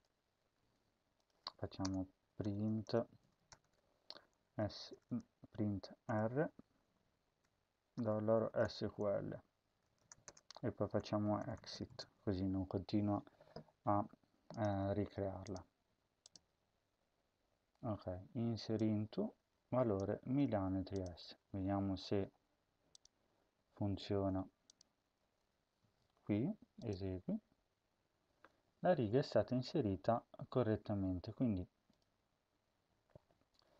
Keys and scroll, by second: 0.3 ctrl+s, 1.7 Return, 1.9-12.2 typing, 9.1 Right, 20.1 ctrl+c.